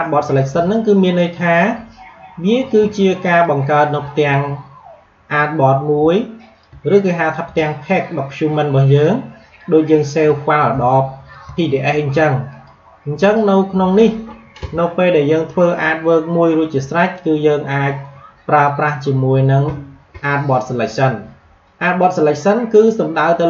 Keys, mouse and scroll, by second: 0.9 click, 3.3-8.9 drag, 8.9-12.4 drag.